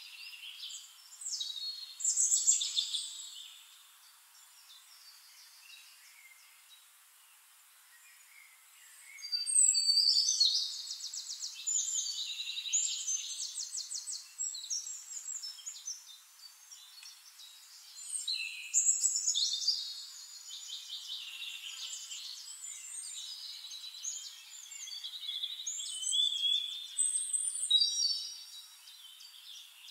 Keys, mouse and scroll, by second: 0.0 click, 1.1-3.9 typing, 4.2 ctrl+a, 4.8 shift+click, 6.3 click, 7.9 ctrl+click, 8.1 ctrl+a, 8.8 b, 10.6 click, 11.8 click, 13.0-13.9 ctrl+drag, 14.0 ctrl+click, 15.0 ctrl+click, 16.1 ctrl+t, 16.4 click, 17.3 ctrl+a, 18.0 ctrl+click, 18.3 ctrl+a, 19.4 Down, 20.0 Down, 20.6 Down, 21.5 Down, 23.2 click, 24.4 ctrl+click, 25.5-27.5 ctrl+drag, 28.8 ctrl+click.